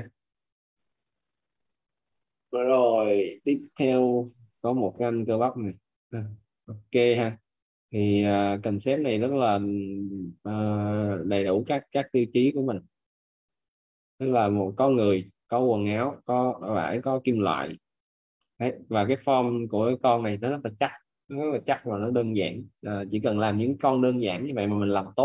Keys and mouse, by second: 0.6 click, 3.4 click, 6.0 click, 12.5 click, 15.7 middle click, 18.2 middle click.